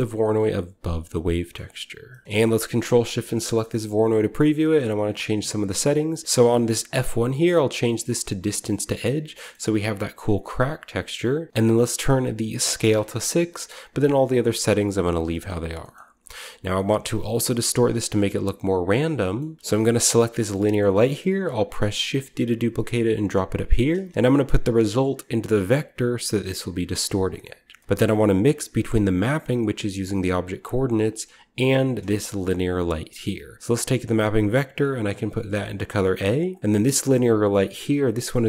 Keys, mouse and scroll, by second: 0.8 click, 1.5 middle click, 2.2 ctrl+shift+middle click, 2.2-3.1 scroll up 1, 2.8-4.3 ctrl+shift+drag, 4.7-5.6 scroll up 1, 5.7 scroll up 1, 5.8-6.5 middle drag, 6.5-10.7 drag, 9.3-11.3 shift+middle drag, 11.8 click, 12.6 6, 12.8-14.5 drag, 14.9 click, 15.1 middle click, 15.1-16.7 scroll down 1, 15.3 middle drag, 15.7-18.8 middle drag, 19.0-19.6 scroll down 1, 19.1 middle click, 19.6-20.1 typing, 21.9 typing, 23.2 drag, 23.5 click, 23.9-27.5 drag, 23.9 typing, 27.6-28.6 scroll down 1, 27.6-28.6 middle drag, 28.6-29.0 drag, 30.2-31.1 drag, 31.7 click, 31.9-33.5 drag, 32.1 g, 36.4 drag, 36.7-37.9 scroll up 1, 36.8 typing, 36.8 drag, 37.9-38.4 drag, 37.9-38.3 scroll up 1.